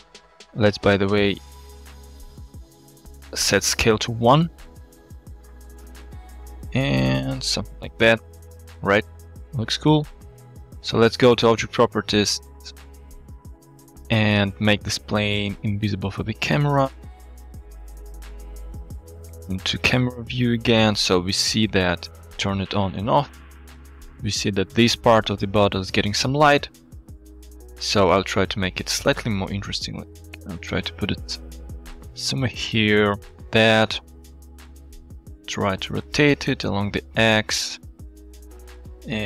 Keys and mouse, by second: 1.6-2.7 drag, 4.9 s, 5.9 s, 6.5 g, 7.8 Tab, 8.1-8.5 middle drag, 9.1 click, 11.6 click, 13.0-13.5 drag, 15.5 click, 17.5 KP_0, 17.7 KP_0, 19.3 alt+shift+z, 20.0-20.8 shift+middle drag, 22.5 click, 23.5 click, 23.9 click, 28.2-28.9 middle drag, 28.9 click, 29.8 g, 29.8 z, 34.6 r, 34.9 x, 37.3-38.1 middle drag, 38.1-38.7 drag.